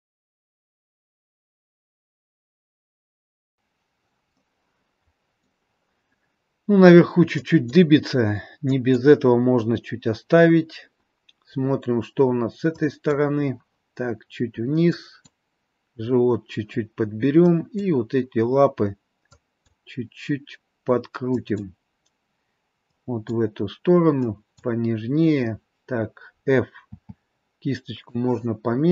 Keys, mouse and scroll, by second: 0.1 click, 0.4 click, 0.7 click, 0.9 click, 1.2 click, 1.5 click, 1.8 click, 2.0 click, 2.2 click, 2.6 click, 3.0 click, 3.4 click, 4.2 middle click, 7.6 click, 8.8 click, 11.0-11.3 scroll up 3, 11.6-12.5 scroll down 3, 12.9 click, 15.1 click, 17.6 click, 19.4 click, 21.5 click, 23.0 click, 24.4 click, 26.8 f.